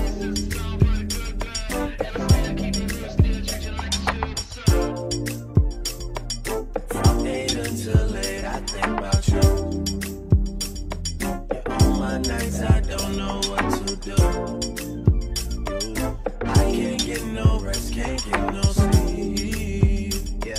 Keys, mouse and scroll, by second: 1.3 click, 11.2 click, 11.5 click.